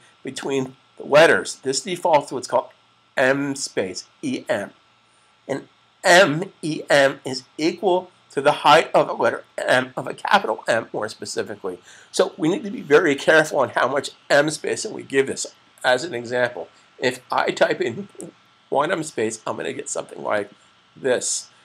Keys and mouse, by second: 0.1 click, 18.0 1.